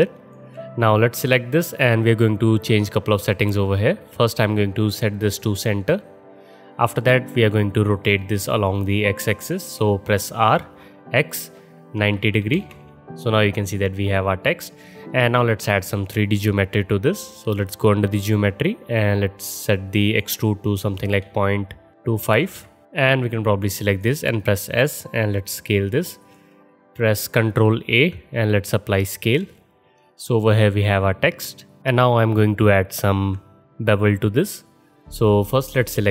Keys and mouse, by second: 4.2-24.0 drag, 10.4 r, 24.3 s, 27.6 ctrl+a, 28.1-29.5 drag, 29.5 middle click, 29.6 alt+drag, 29.8 alt+middle click, 29.8-32.1 alt+drag, 32.1-33.3 middle drag, 33.3-34.8 drag, 34.6 alt+middle click, 34.8 alt+middle click, 35.0 alt+drag, 35.2 alt+middle click, 35.4 alt+click, 35.5-36.1 alt+middle drag, 35.8 click.